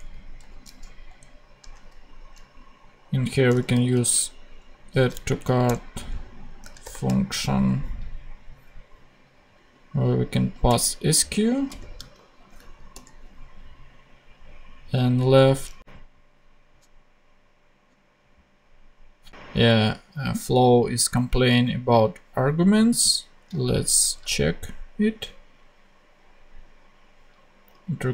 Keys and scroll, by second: 3.4 a, 4.7 d, 5.2 Down, 5.6 Return, 6.5 shift+Return, 6.8 shift+9, 10.5 super+c, 11.7 super+v, 12.1 super+Right, 12.9 super+;, 13.5 ;.